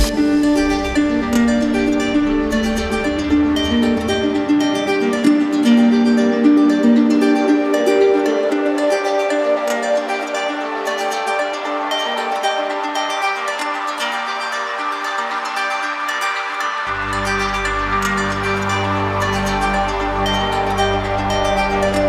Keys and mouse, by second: 0.7-1.7 drag, 1.9-3.0 drag, 4.0-5.1 drag, 6.3 click, 7.2 click, 8.2 click, 12.9 click, 15.4 click, 18.9 shift+click, 19.4 ctrl+z, 20.9 ctrl+z.